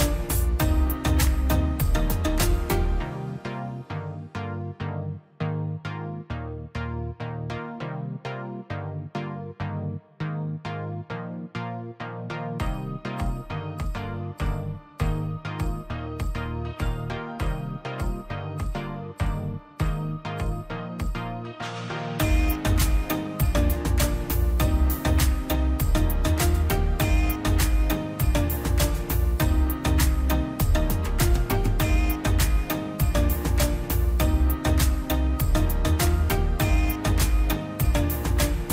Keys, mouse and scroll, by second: 0.1 click, 0.2-1.0 scroll down 1, 1.2 click, 2.0 ctrl+click, 2.6 m, 3.4 click, 3.6 scroll down 1, 5.8 click, 8.1-9.0 scroll down 1, 9.3 middle click, 9.9-10.3 scroll down 1, 10.9 click, 11.1 scroll up 1, 14.8 p, 16.1 middle click, 16.2 scroll up 1, 16.8 scroll down 1, 16.8-18.5 drag, 18.5 middle click, 19.2 ctrl+z, 19.7 click, 20.5-20.9 scroll up 1, 20.9 click, 25.6 scroll down 1, 25.8 middle click, 26.4 scroll up 1, 26.6 click, 27.9 click, 28.2-28.5 scroll down 1, 28.5 click, 29.0-29.8 scroll down 1, 31.0 ctrl+z, 32.1-32.6 scroll up 1, 32.6 click, 34.6-35.0 scroll up 1, 35.0 click, 35.5 click, 37.1 ctrl+z, 37.5 click, 38.6 scroll up 1.